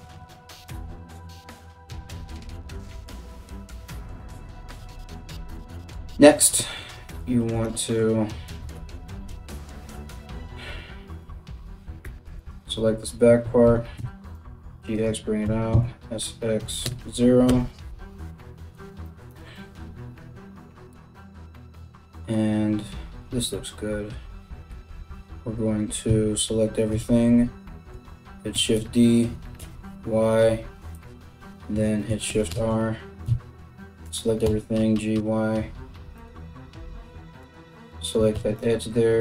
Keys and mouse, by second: 8.4 KP_7, 11.7 2, 12.0 alt+right click, 13.3 g, 15.0 s, 25.7 a, 26.5 KP_7, 28.1 shift+d, 31.9 shift+r, 32.9 a, 33.6 g, 37.0 alt+right click, 37.9 shift+s.